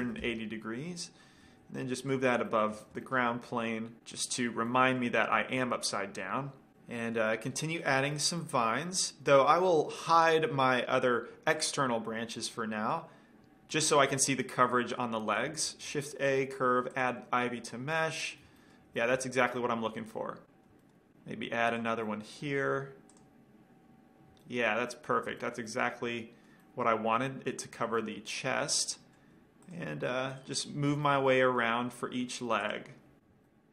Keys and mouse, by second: 1.7 g, 2.5-4.0 drag, 2.7-3.3 middle drag, 2.7 right drag, 4.3-6.7 middle drag, 7.0-10.8 middle drag, 8.3 drag, 8.3-9.9 right drag, 11.8-13.5 drag, 12.6-13.5 middle drag, 13.8 middle click, 15.9 shift+a, 18.5-21.2 middle drag, 22.1-24.0 right drag, 22.3-24.5 middle drag, 24.0 click, 24.7-29.8 middle drag, 30.0-30.9 drag, 33.3-33.7 drag.